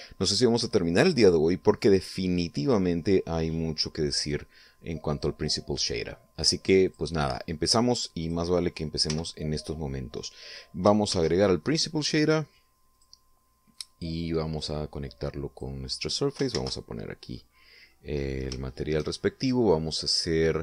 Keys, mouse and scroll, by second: 5.4 click, 7.2 click, 8.6 click, 9.4 x, 11.5 shift+a, 13.3 click, 14.1 click, 15.0-16.1 drag, 16.8 shift+z, 17.8 middle click, 18.5-18.9 scroll up 3, 19.0 shift+middle click.